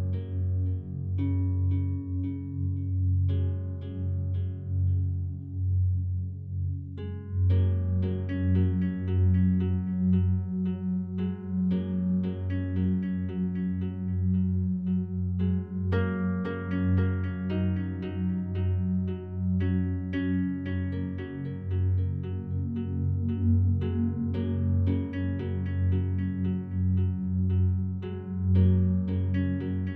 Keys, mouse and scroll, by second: 5.2 s, 9.6 right click, 10.5 s, 10.9 z, 13.2 right click, 18.3 s, 19.1 shift+x, 21.5 right click, 22.0 a, 22.2 a, 22.8-26.1 alt+drag, 26.1 Tab, 28.4 right click, 28.6-29.9 alt+drag.